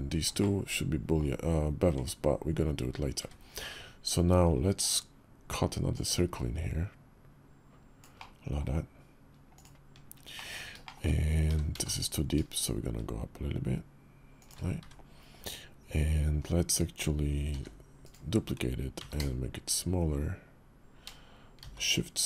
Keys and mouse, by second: 0.2 click, 0.9 middle click, 1.7 Tab, 3.0 `, 5.7-9.4 drag, 10.1 middle drag, 10.6 shift+middle click, 11.2 g, 14.6 `, 16.1 KP_5, 17.3 shift+d, 18.7 s.